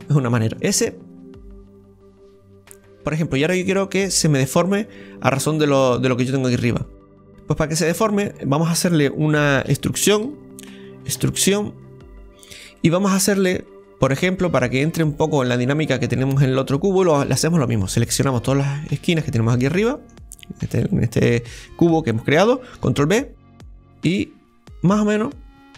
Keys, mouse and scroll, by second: 0.5 s, 7.9-9.7 middle drag, 9.7 Tab, 12.8-14.2 middle drag, 14.2-15.7 right drag, 15.7 click, 16.7 right click, 17.1-19.5 middle drag, 18.2 shift+right click, 19.5 right click, 19.8-25.7 middle drag, 20.5 shift+right click.